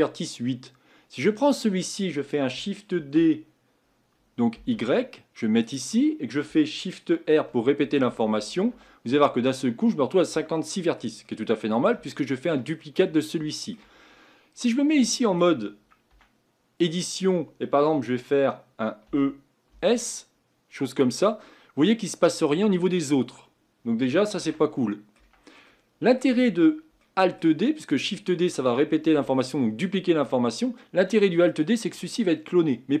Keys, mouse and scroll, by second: 1.4 click, 3.0 shift+d, 7.5-8.6 typing, 9.4-10.5 scroll down 2, 10.5-14.0 shift+middle drag, 14.0-14.6 scroll up 5, 14.6 click, 15.1-16.1 shift+middle drag, 16.1 Tab, 16.9-19.1 middle drag, 19.1 e, 21.5-22.5 middle drag, 22.5-23.2 scroll down 2, 23.2-24.0 scroll down 3, 24.4 ctrl+z, 24.8 middle click, 25.2 Tab, 25.7-33.0 middle drag.